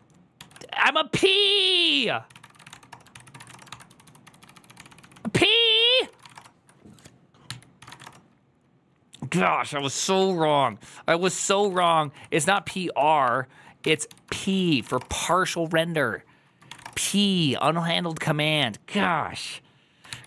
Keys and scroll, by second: 9.7-10.5 typing.